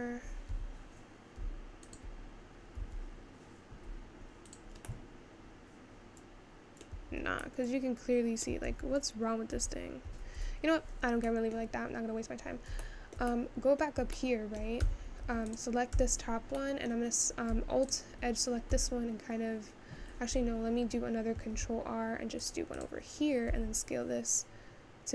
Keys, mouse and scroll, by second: 1.9 alt+click, 2.8 s, 5.0-7.2 middle drag, 7.2 Tab, 7.7-9.3 middle drag, 9.3 ctrl+z, 9.7 ctrl+z, 10.5 Tab, 10.8-11.5 scroll down 4, 11.5 middle click, 11.9-12.6 scroll down 5, 12.6-13.1 scroll up 2, 13.1-14.9 shift+middle drag, 14.9 Tab, 15.6 click, 16.3 Tab, 16.7-17.9 middle drag, 17.9 alt+click, 18.8 s, 20.8-21.5 scroll up 2, 21.5 ctrl+r, 23.5 s.